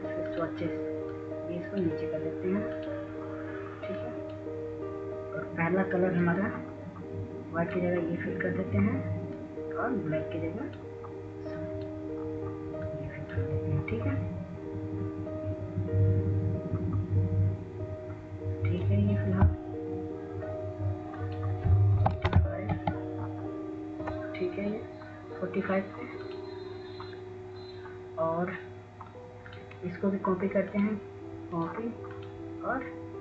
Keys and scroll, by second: 23.4-24.1 typing.